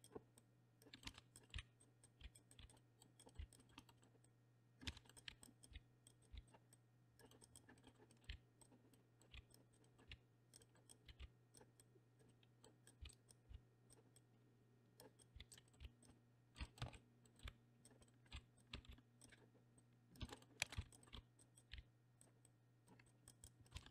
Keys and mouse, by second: 0.4-0.8 drag, 1.0 middle click, 1.1 shift+middle click, 1.3 click, 1.4 middle click, 1.5 r, 2.0 click, 2.2 r, 2.5 click, 2.6 r, 2.7 middle drag, 3.3 middle click, 3.4 r, 3.6 middle click, 3.8 middle click, 3.9 middle click, 4.2-4.8 drag, 4.9 shift+middle drag, 5.0 middle click, 5.3 r, 5.6 click, 5.7 r, 6.3 r, 6.7-7.2 drag, 7.2 middle click, 7.4 click, 7.5 click, 7.8 middle click, 7.9 middle click, 8.1 middle click, 8.3 r, 8.9 middle drag, 9.3 r, 9.7 click, 9.8 middle click, 10.1 r, 10.6 middle click, 11.2 r, 11.8-12.2 drag, 12.3 middle click, 12.8 click, 13.0 r, 13.3 click, 13.5 r, 14.1-15.0 drag, 15.3-17.4 typing, 15.6 middle click, 16.1-16.5 middle drag, 16.6 middle click, 16.9 middle click, 17.3 middle click, 18.0 middle click, 18.2 middle drag, 18.6 z, 18.7 z, 18.9 r, 19.3 middle click, 19.8-20.1 drag, 20.2 shift+middle click, 20.4 middle click, 20.6 shift+middle click, 20.8 z, 21.0 middle click, 21.1 r, 21.7 r, 22.4-22.8 drag, 23.0 click, 23.2 click, 23.4 drag, 23.6 middle click, 23.8 shift+middle click.